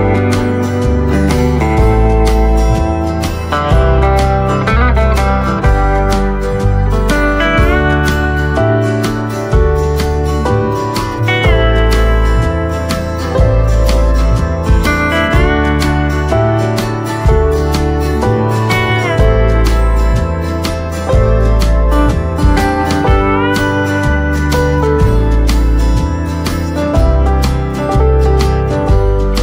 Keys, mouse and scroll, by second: 0.9 click, 8.8-9.8 typing, 9.1 click, 9.4 scroll up 1, 10.3 shift+click, 15.0-15.3 scroll down 1, 15.3 right click, 16.2 click, 16.2 typing, 16.5 right click, 17.2 click, 17.5 right click, 18.5 click, 19.1 right click, 20.3 scroll up 1, 20.8 click, 21.1 right click, 21.7 click, 23.6 right click, 23.6 typing, 24.1 scroll up 1, 24.8 click, 28.7 shift+click.